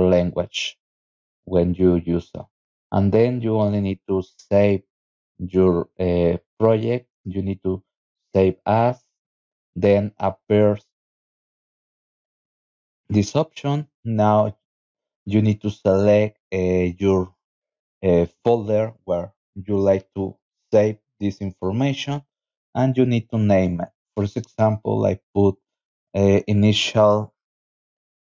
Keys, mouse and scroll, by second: 0.0 click, 5.9 click, 8.4 click, 10.8 click, 11.4 click, 12.5 click, 14.4 click, 17.6 click, 20.9 click, 22.0 click, 22.5 click, 23.0 click, 23.6 click, 24.7 BackSpace, 26.8-28.1 typing.